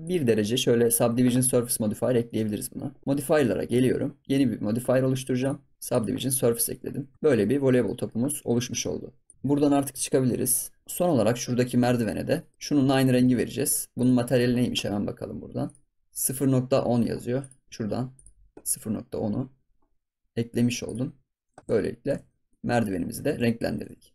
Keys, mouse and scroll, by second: 0.0 click, 0.3-2.0 middle drag, 2.0 scroll down 2, 2.2-3.6 middle drag, 3.6 click, 4.2 click, 5.4 drag, 5.7 scroll down 3, 5.8 click, 6.1 scroll up 6, 6.3 scroll down 1, 6.6 middle click, 6.8 scroll up 3, 7.1 ctrl+s, 7.5 scroll down 2, 7.8-8.1 middle drag, 8.1 scroll up 7, 8.5 ctrl+s, 8.7 scroll down 3, 8.9-9.3 scroll up 8, 9.2 click, 10.2 KP_Divide, 10.8 scroll down 6, 11.1-12.1 middle drag, 12.1 scroll up 3, 12.3-13.9 middle drag, 13.9 click, 15.6-17.0 drag, 17.3 click, 18.1-21.1 drag, 21.6 scroll down 2, 21.6 middle click, 22.2 ctrl+s, 22.2 scroll down 2, 22.5 middle click, 22.8 scroll down 1, 22.9 scroll up 4, 23.2 ctrl+s, 23.4 shift+middle click, 23.7 scroll down 3, 23.8 ctrl+s, 24.0 middle click.